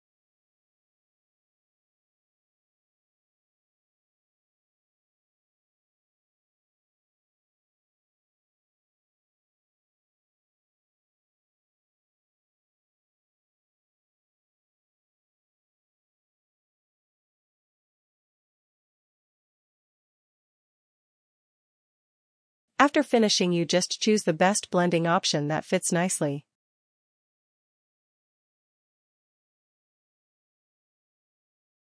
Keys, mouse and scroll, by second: 3.3 click, 6.0 click, 10.7 click, 12.8 ctrl+t, 12.8 click, 18.5 click, 22.5 click, 26.4 click.